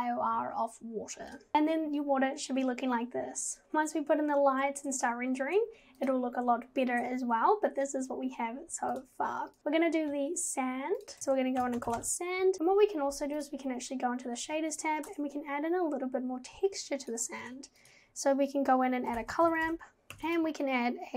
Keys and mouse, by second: 1.4 click, 6.0 click, 11.0 click, 11.2-12.5 shift+drag.